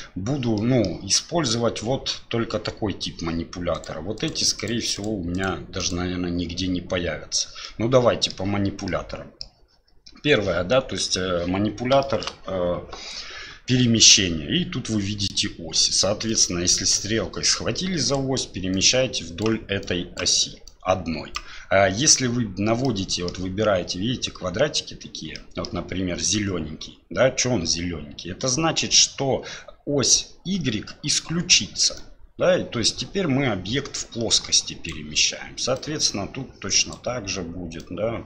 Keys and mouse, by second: 0.6 middle drag, 3.8 click, 4.2 click, 4.6 click, 4.9 click, 5.4 click, 5.8 click, 7.6-8.3 middle drag, 8.9-9.4 middle drag, 12.0 shift+middle drag, 16.3-18.1 drag, 18.7 click, 19.8 click, 20.6 click, 22.8-23.3 middle drag, 25.3-25.7 middle drag, 31.9-34.9 drag, 35.7-36.9 drag, 37.8-38.2 drag.